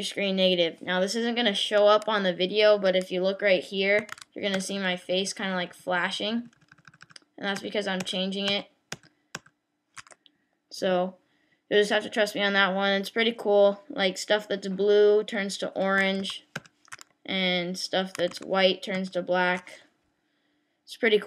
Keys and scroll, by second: 4.5 ctrl+alt+super+8, 16.6 ctrl+alt+super+8.